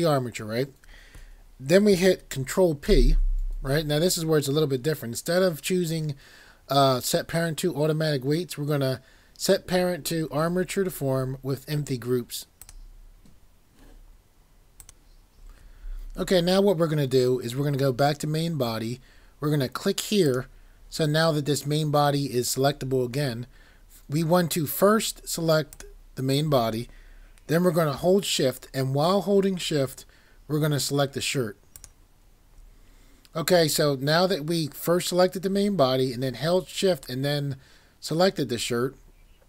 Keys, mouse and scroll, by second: 12.6 click.